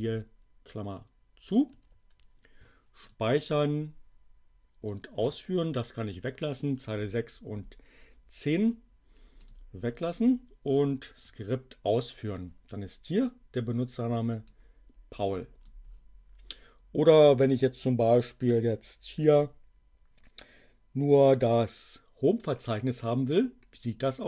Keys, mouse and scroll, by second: 1.6 alt+9, 3.0 click, 5.0 click, 9.4 click, 10.1 click, 11.0 Up, 11.3 Return, 14.4-15.8 drag.